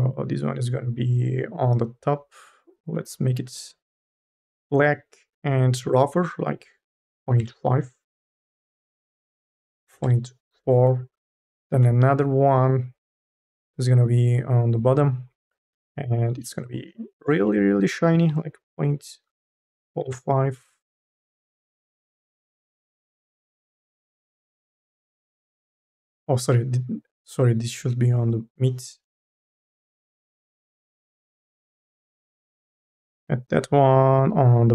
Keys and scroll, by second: 7.4 Return, 10.0 Return, 18.6 KP_1, 19.3 BackSpace, 19.8 ., 20.0 Return.